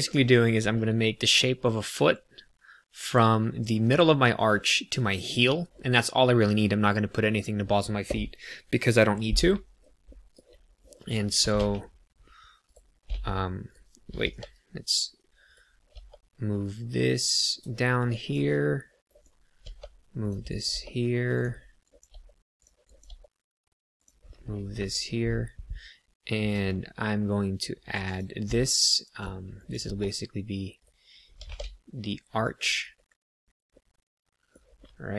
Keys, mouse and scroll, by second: 10.0 shift+middle click, 10.8 click, 11.4 g, 11.5 z, 12.6 right click, 13.0 z, 14.2 g, 15.4 right click, 15.9 g, 17.3 click, 18.0 click, 19.1 click, 19.6 g, 20.2 click, 20.4 click, 20.7 g, 21.3 click, 21.7 click, 22.0 g, 22.5 click, 22.8 click, 23.0 g, 23.9 click, 24.7 ctrl+r, 28.1 click, 28.5 middle click, 29.5 click, 29.8 g, 30.7 right click, 31.3 g, 31.4 z, 32.3 click, 32.9 KP_3, 33.7 middle click, 34.7 middle click.